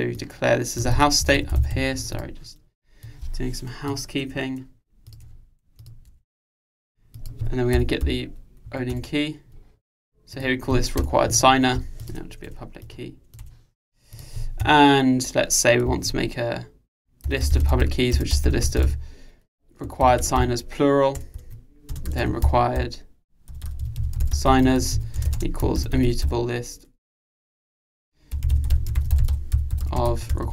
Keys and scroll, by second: 9.0 Return.